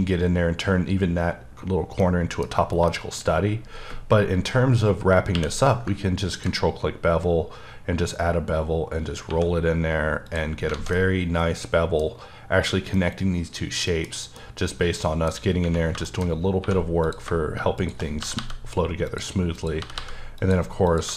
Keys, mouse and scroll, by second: 2.0 middle click, 2.5 scroll up 2, 2.9 shift+middle click, 4.2-4.9 scroll down 2, 4.9 scroll up 2, 5.4 q, 6.3 ctrl+click, 7.3-7.9 scroll up 3, 8.5-9.3 scroll up 2, 9.3 1, 10.3 click, 10.5 scroll down 3, 10.7 alt+a, 10.9 middle click, 12.9 middle click, 14.4 middle click, 15.4-16.6 scroll up 4, 16.1 shift+middle click, 16.6 1, 17.1 click, 18.2 g, 18.4 g, 19.1 click, 19.6 click, 19.8 g, 20.0 g, 20.4 click, 20.9 click.